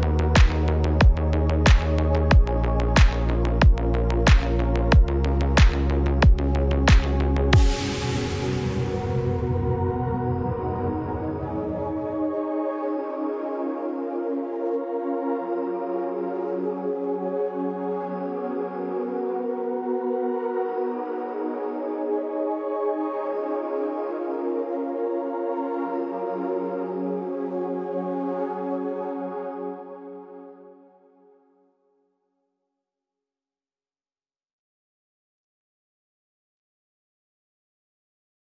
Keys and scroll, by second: 6.1 shift+c, 6.2 shift+o, 21.1 Down, 21.2 Left, 21.3 Down, 21.4 Left, 22.7 Down, 23.4 Left, 23.8 Down, 24.7 Left, 25.1 Down.